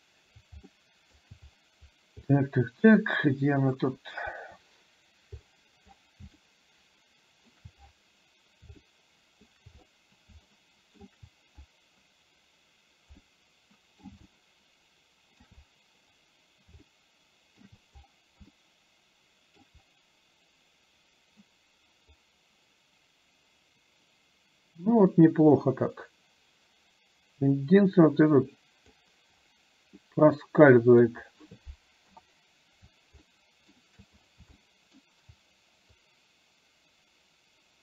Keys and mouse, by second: 0.9 middle click, 2.4-3.7 middle drag, 4.4 KP_1, 6.4-7.5 middle drag, 8.9 shift+middle click, 10.6 shift+middle click, 13.2 middle click, 14.4-15.5 shift+middle drag, 17.0 shift+middle click, 18.5-19.7 shift+middle drag, 22.5-29.2 drag, 30.1 middle click, 32.1 KP_7, 33.2 middle click, 34.6 shift+middle click, 36.2-37.8 drag.